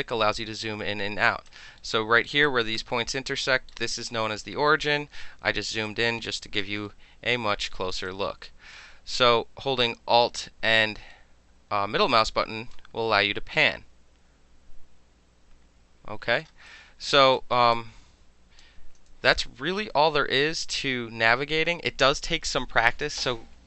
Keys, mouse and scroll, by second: 1.8 alt+middle click, 2.4 alt+right click, 2.9 alt+click, 3.1-3.4 alt+middle drag, 3.7-5.2 alt+middle drag, 5.7 alt+middle click, 5.8-6.4 alt+drag, 6.4 alt+right click, 6.6 alt+middle drag, 7.9 alt+middle click, 8.0-8.6 alt+right drag, 8.6 alt+click, 8.7 alt+middle click, 9.3 alt+middle click, 10.2-11.1 alt+middle drag, 11.9 alt+middle drag, 12.2-12.7 alt+drag, 12.7-13.3 alt+middle drag, 16.4 alt+middle drag, 16.6-17.3 alt+drag, 17.3-17.7 alt+middle drag, 17.7 alt+click, 19.1 alt+middle click, 19.3-22.5 alt+drag.